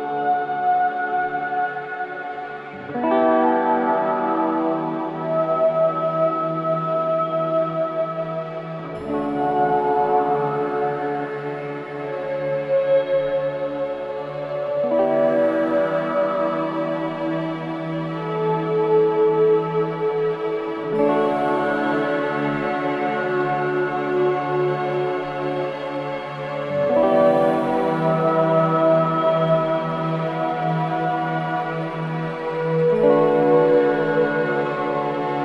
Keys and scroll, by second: 0.6 ctrl+shift+], 2.8 ctrl+KP_0, 10.6 ctrl+z, 11.6 ctrl+KP_0, 14.2 ctrl+KP_2, 31.6 0.